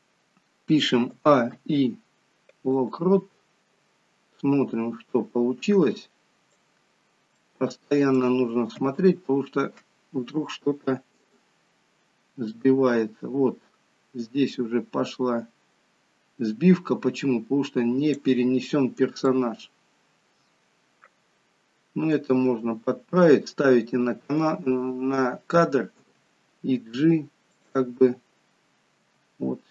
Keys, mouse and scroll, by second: 1.0 a, 1.4 i, 4.3 click, 7.4 shift+middle click, 8.7 KP_3, 10.6 click, 19.3 shift+middle click, 26.0 g, 28.0-28.9 scroll down 2, 29.0 g.